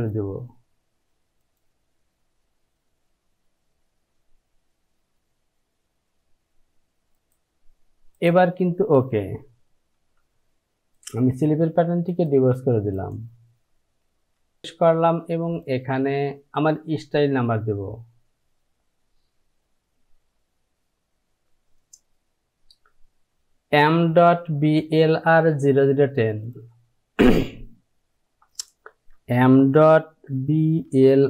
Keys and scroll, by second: 10.1 Home, 14.6 j, 14.6 KP_Multiply, 29.4-31.2 typing.